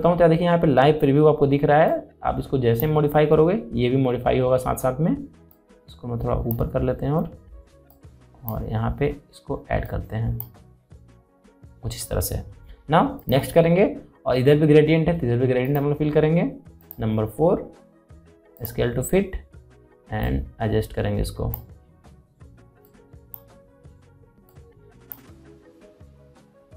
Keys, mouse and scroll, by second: 6.2-13.8 drag, 16.3-26.7 drag.